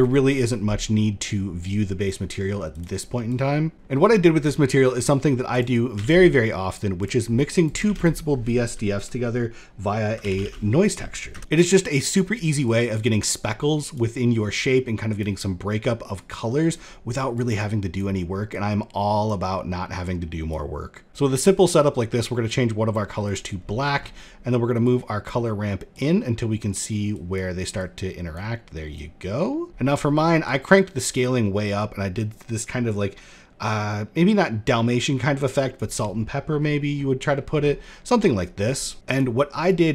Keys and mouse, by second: 2.2 click, 2.8 click, 4.0 middle click, 5.0 click, 5.5 shift+d, 6.9 middle click, 7.2 click, 7.3 shift+a, 11.4 click, 12.2 click, 13.3 click, 14.0-14.8 drag, 15.7-16.2 drag, 16.9-17.5 drag, 18.0-18.8 drag, 19.6 click, 20.8 click, 21.0 click, 22.8 click, 23.1 middle click, 24.3-24.8 drag, 25.4-26.3 drag, 26.7 drag, 27.3-27.9 drag, 28.4-29.7 drag, 30.1-35.3 drag, 36.8 middle click, 38.9-39.5 middle drag, 39.5 click.